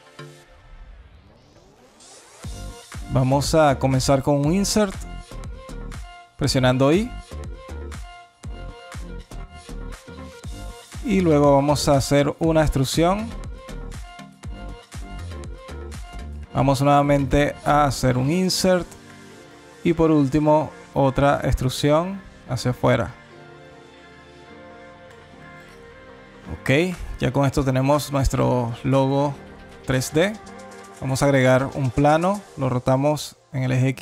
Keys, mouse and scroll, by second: 0.1 alt+click, 1.7 alt+shift+click, 2.3 alt+click, 3.2 alt+middle click, 3.6 scroll up 1, 4.0 alt+click, 4.5 alt+middle click, 4.9 alt+scroll down 1, 6.6 i, 10.9 right click, 19.4 right click, 24.7 alt+click, 25.8 Tab, 26.2 scroll down 3, 26.7 alt+click, 28.2 click, 28.3 shift+a, 31.3 r.